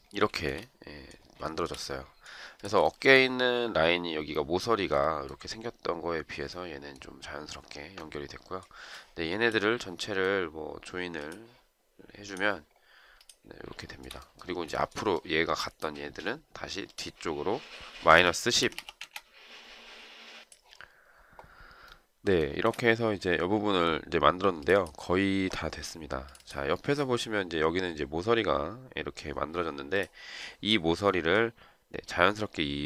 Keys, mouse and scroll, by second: 0.3 shift+right click, 2.8 shift+right click, 13.8 shift+right click, 14.7 shift+right click, 17.8-19.1 typing, 22.5 shift+right click.